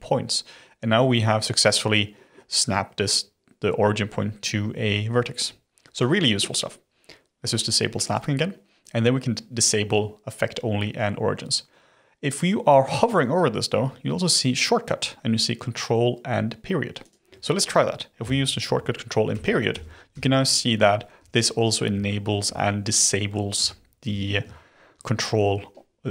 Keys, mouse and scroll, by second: 8.0 click, 17.0 click, 18.6 ctrl+., 19.3 ctrl+., 19.7 ctrl+., 20.1 ctrl+., 21.1 ctrl+., 21.9 ctrl+., 22.4 ctrl+., 23.5 ctrl+., 24.0 ctrl+..